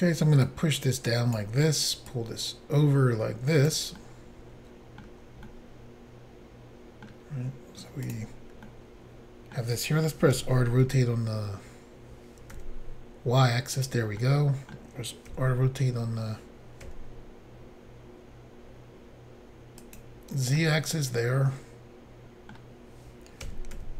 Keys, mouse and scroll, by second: 0.4 click, 2.1 click, 4.0 middle click, 5.5 middle click, 8.1 click, 8.1 click, 8.6 middle click, 10.3-10.9 typing, 12.6 y, 13.8 click, 14.2 middle click, 15.3 r, 16.9 z, 19.8 click, 20.6 middle click, 23.5 typing.